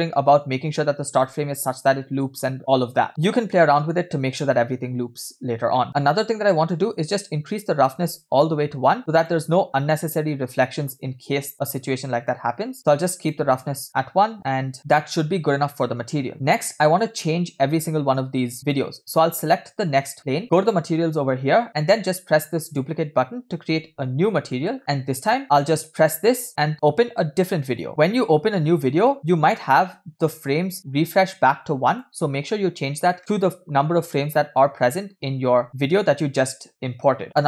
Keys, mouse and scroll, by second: 3.1 middle click, 3.1 scroll down 2, 5.7 middle click, 5.9-6.5 scroll up 4, 7.0-8.0 drag, 9.0 click, 12.3-13.4 drag, 13.9 middle click, 13.9 scroll down 2, 14.5 middle click, 14.8 scroll down 1, 15.3 scroll up 2, 16.3 scroll down 1, 18.7 click, 20.6 click, 22.7 click, 24.5 middle click, 24.8 middle click, 24.8 scroll up 2, 25.4 scroll up 2, 27.7 click, 27.9 middle click, 27.9 scroll down 2, 29.1 middle click, 29.2 scroll up 2, 31.9-34.7 drag, 37.3 click.